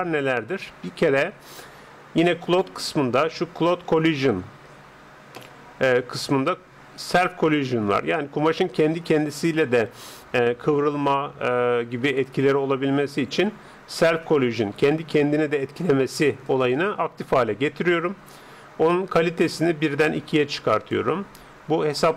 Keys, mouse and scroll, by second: 2.4-4.2 drag, 4.0-8.8 middle drag, 16.4-18.3 drag, 19.2-21.0 drag.